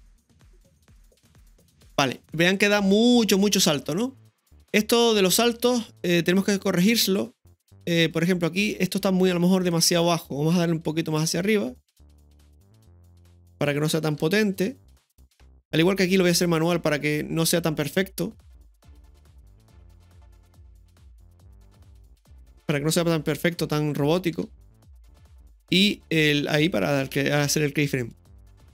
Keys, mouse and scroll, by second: 6.5-8.9 drag, 9.7 right click, 11.2-13.1 drag, 14.2 right click, 14.2 i, 18.9 click, 19.5-20.9 right drag, 20.9-23.9 drag, 24.3 i, 26.6 click, 27.9 space.